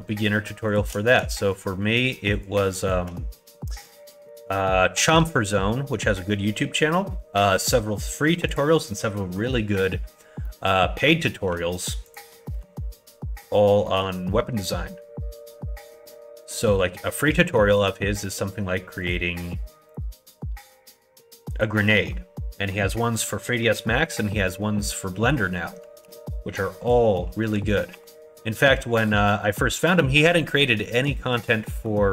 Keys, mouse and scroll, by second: 0.6 shift+click, 1.5 shift+click, 2.8 shift+click, 3.3 middle click, 3.6 middle click, 4.1 shift+middle click, 5.1 x, 9.1 middle click, 10.4 middle click, 10.9 2, 12.1 alt+click, 12.4 middle click, 13.8 middle click, 16.4 click, 17.7 shift+click, 19.0 shift+click, 19.8 shift+click, 20.3 shift+click, 21.5 shift+click, 21.9 middle click, 22.5 middle click, 26.0 ctrl+e, 27.9 ctrl+r, 30.9 middle click, 31.2 shift+middle click, 31.7 middle click.